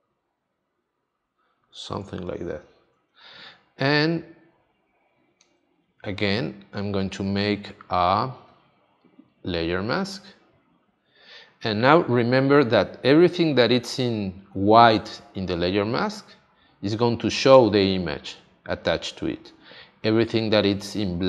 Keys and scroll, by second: 1.9 space.